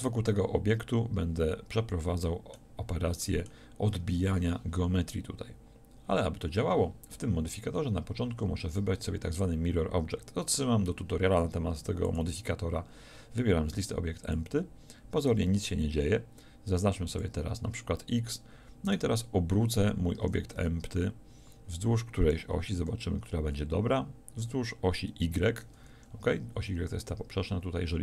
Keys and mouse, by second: 6.9-12.1 middle drag, 15.3-17.1 middle drag, 20.2 r, 20.8 middle click.